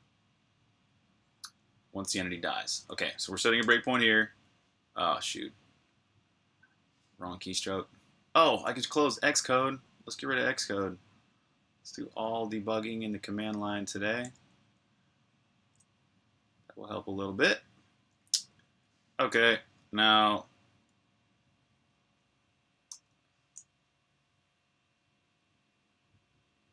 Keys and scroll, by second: 3.5 super+\, 4.3-5.7 typing, 5.6 super+o, 7.8 Return, 15.5 super+q, 22.8-25.1 typing, 26.4-26.7 typing.